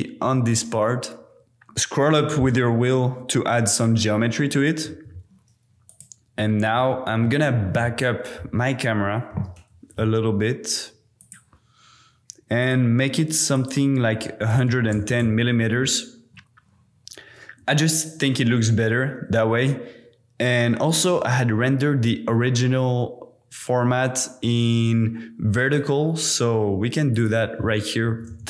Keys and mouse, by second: 1.7 Tab, 4.9 Tab, 5.8 click, 7.1 shift+click, 9.3 g, 9.5 y, 11.2 click, 12.6 click, 13.5-15.2 drag, 14.7 KP_1, 20.8 click, 25.6 click, 27.1-28.4 drag.